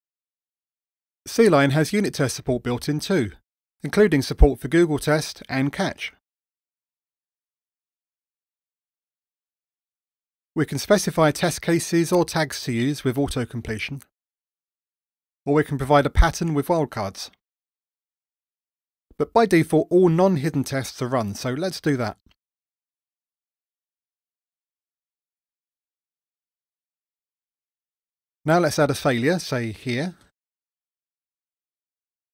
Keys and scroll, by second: 11.5 Tab, 14.6 Delete, 18.7 Delete, 22.2 ctrl+r, 31.2 ctrl+r.